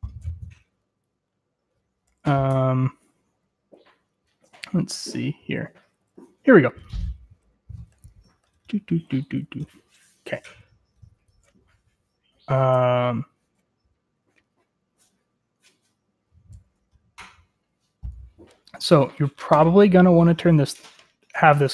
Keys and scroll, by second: 0.0-0.1 typing, 2.6-2.9 k, 3.3 k, 4.2 k, 10.8-11.5 typing, 18.7 j.